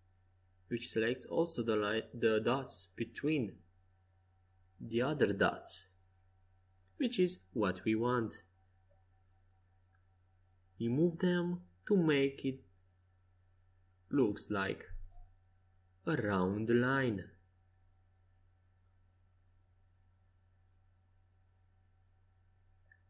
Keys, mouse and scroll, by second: 1.5-4.0 drag, 4.0 c, 5.4 a, 6.5 c, 8.5-10.5 drag, 12.7 a, 13.1 c, 14.8-16.8 drag, 19.3 a.